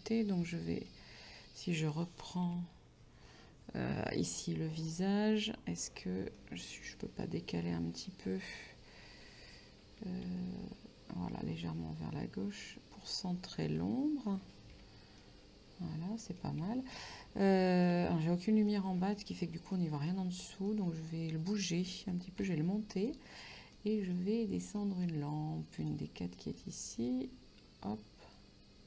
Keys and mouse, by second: 0.5 Tab, 0.9 middle click, 1.5 right click, 2.5 l, 4.5 middle click, 6.4 middle click, 9.8 g, 13.6 shift+click, 14.8 Tab, 15.3 middle click, 17.5 shift+middle click, 18.8 middle click, 20.1 middle click, 22.0 g, 22.5 z, 23.1 click, 23.8 middle click, 24.9 middle click, 25.9 click, 26.4 right click.